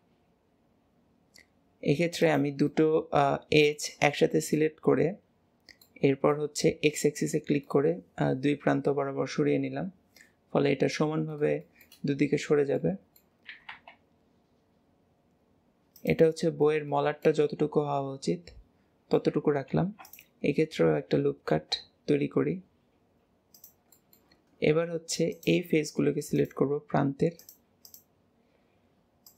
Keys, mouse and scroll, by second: 2.6-12.1 middle drag, 12.1-12.8 scroll up 1, 12.8 middle click, 13.4 s, 16.3-19.7 middle drag, 19.7 ctrl+r, 23.9-25.3 middle drag, 25.3 click, 26.3 click, 27.4 shift+click, 27.8 shift+click, 29.2 shift+click.